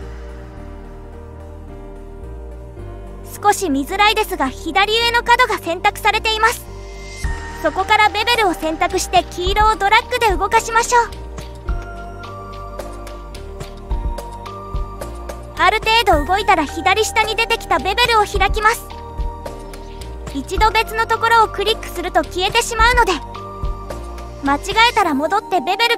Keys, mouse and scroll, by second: 0.4 click, 2.3 click, 3.5-5.4 middle drag, 5.7-6.1 scroll up 2, 6.3-8.2 middle drag, 8.7 scroll down 1, 9.3-10.7 scroll down 1, 13.0 click, 15.6 click, 15.9-19.4 drag, 25.0 click.